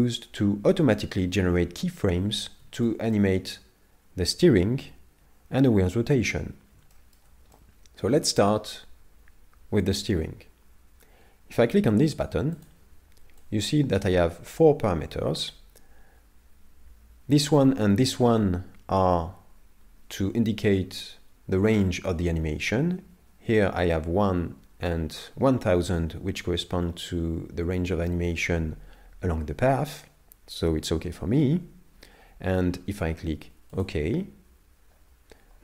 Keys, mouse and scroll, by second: 2.8 shift+middle click, 6.9 shift+middle click, 7.6 middle click, 12.6 click.